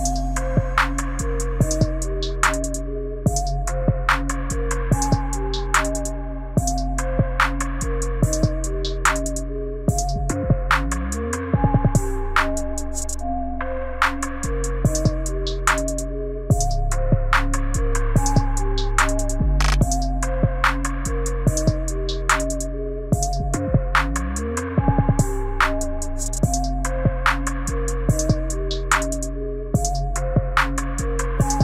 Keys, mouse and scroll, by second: 6.9 space, 8.6 right click, 12.7 space, 22.2 space, 24.4 right click, 30.4 space.